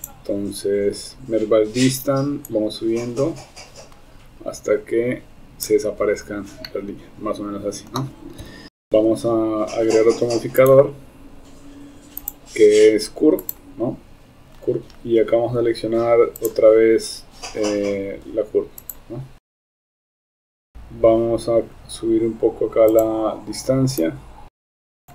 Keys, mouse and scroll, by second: 0.1 click, 2.6-5.7 drag, 6.7-7.9 middle drag, 8.4 KP_7, 10.8-11.3 drag, 12.4-13.6 drag, 16.4 click, 19.5 Tab, 19.6 Tab, 19.9 click, 19.9 Tab, 20.4 Tab, 20.5 Tab, 23.0 click, 24.1 click.